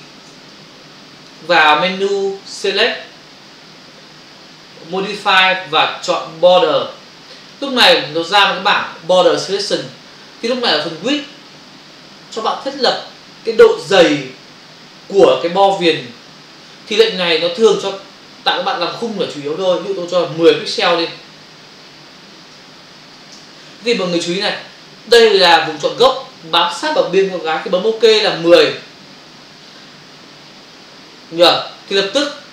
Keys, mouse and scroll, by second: 0.3 space, 2.5 click, 6.6 click, 7.5 click, 22.6 BackSpace, 23.1 1, 28.5 click.